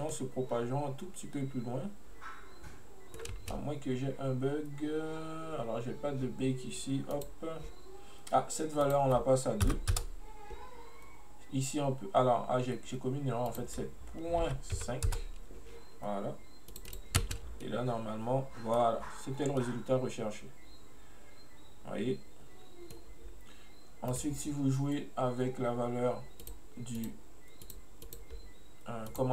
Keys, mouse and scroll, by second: 0.2-3.2 middle drag, 3.4 space, 7.2-11.9 drag, 13.5-16.6 drag, 16.7-17.3 drag, 17.3 space, 17.7-22.7 middle drag, 24.2 right click, 26.5-28.2 drag, 29.2 click.